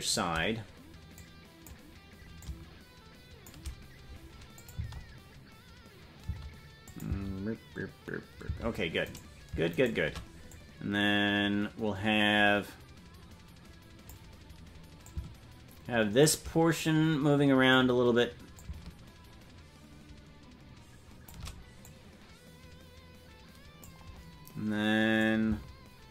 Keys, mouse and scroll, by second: 1.1 click, 2.4-3.5 drag, 4.5 click, 4.7 space, 6.6 space, 6.8 click, 7.0 space, 9.1 right click, 10.5-14.1 drag, 15.0-16.3 drag, 16.8 click, 18.5-21.3 drag, 21.8-23.9 drag, 25.2-26.1 drag.